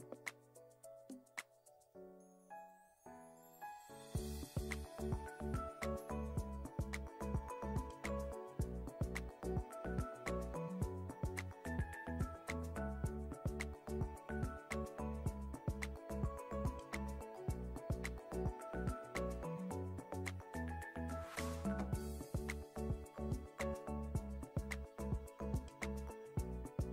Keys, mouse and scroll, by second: 0.1 s, 0.4 right click, 0.9 click, 1.0 scroll up 4, 1.1 Tab, 1.4 3, 1.4 alt+z, 1.5 click, 2.2 x, 2.4 click, 2.7 g, 3.2 s, 3.4-3.8 scroll up 3, 3.8 click, 4.4 2, 4.8 s, 5.2 alt+click, 5.5 s, 6.4 alt+click, 6.7 ctrl+b, 8.1 a, 8.4 s, 9.8-10.3 scroll down 4, 9.9 shift+middle click, 10.1 Tab, 10.3 middle click, 10.4 alt+z, 10.5 scroll up 4, 10.7 click, 10.9 Tab, 11.2 2, 11.3 alt+click, 12.2 click, 12.3 s, 13.4 g, 14.4 s, 15.1 Tab, 15.2 click, 15.3 middle drag, 15.4 click, 15.5 shift+middle click, 15.6 scroll up 1, 15.7 middle click, 15.8 Tab, 16.1 2, 16.3 alt+click, 16.5 e, 17.7 middle click, 18.1 2, 18.3 click, 18.7 3, 18.7 shift+click, 19.2 ctrl+z, 19.3 shift+click, 20.1 alt+e, 21.2 middle click, 21.8 s, 22.4 click, 23.2 s, 23.5 Tab, 23.7-24.0 scroll down 3, 23.7 middle drag, 24.0 shift+middle drag, 24.4 shift+drag, 24.8 ctrl+a, 25.3 click, 26.0-26.7 drag.